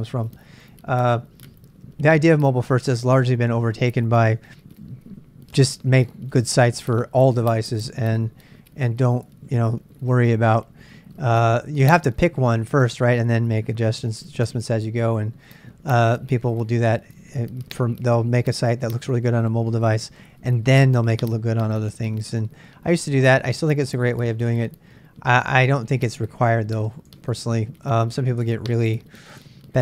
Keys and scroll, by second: 27.0 super+Tab, 27.8 super+Tab.